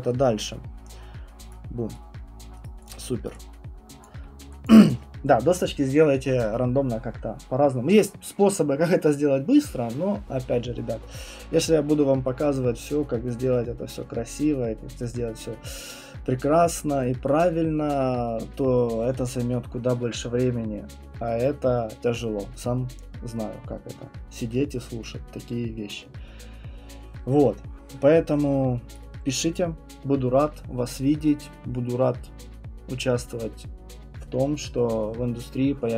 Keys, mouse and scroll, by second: 1.5 right click, 2.6 right click, 2.9 click, 4.0 alt+click, 4.7 alt+click, 27.8-28.9 scroll, 28.9 right click, 28.9-32.2 scroll.